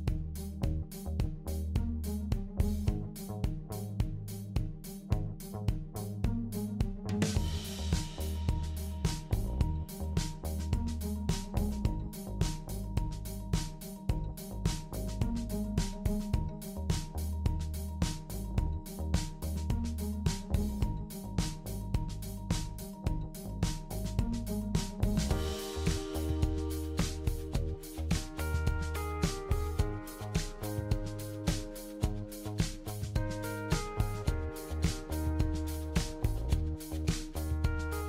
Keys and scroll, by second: 5.6 typing, 7.3-10.7 typing, 25.3-26.1 typing, 31.7-32.4 typing, 37.4-38.0 typing.